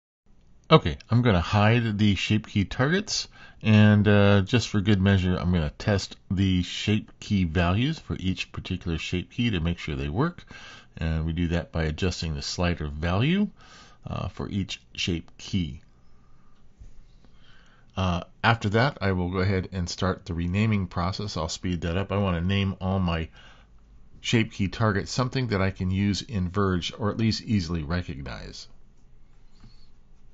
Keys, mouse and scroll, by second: 3.7 click, 5.3 h, 6.7 shift+middle click, 7.9 click, 8.8 KP_5, 10.5 shift+middle click, 12.5-15.2 drag, 16.5 click, 17.5 click, 17.8 click, 18.0 click, 18.3 click, 18.7 click, 19.0 click, 19.3 click, 19.8 click, 19.9 click, 20.2 click, 20.8 shift+click, 21.1 click, 21.5 click, 22.4 click, 22.7-23.7 shift+drag, 23.2 BackSpace, 23.9 click, 24.0 click, 24.6-25.9 drag, 26.0 shift+click, 26.5 shift+BackSpace, 26.8 middle click, 26.9 middle click, 27.3 click, 27.6 click, 27.8 middle click, 28.0 middle click, 28.6 click, 29.0 middle click, 29.8 middle click, 30.0 shift+middle click.